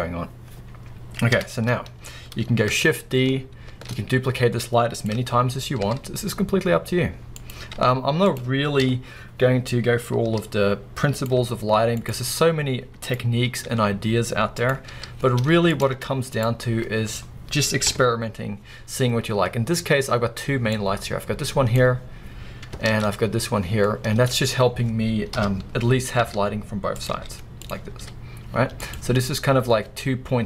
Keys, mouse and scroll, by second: 1.3 KP_1, 3.7 shift+d, 5.0 click, 5.2 t, 5.9 r, 7.5 click, 7.8 g, 8.4 click, 8.8 KP_7, 10.3 r, 11.2 click, 11.4 g, 12.1 click, 13.1 click, 13.7 g, 14.7 click, 14.9 r, 15.9 click, 15.9 z, 17.9 KP_0, 19.2 scroll down 1, 20.7 click, 22.9 ctrl+z, 23.7 scroll down 2, 23.9-27.0 middle drag, 24.6-25.3 scroll down 2, 25.3 KP_7, 26.2 r, 27.0 click, 27.1 g, 27.6 click, 27.9 s, 28.9 click.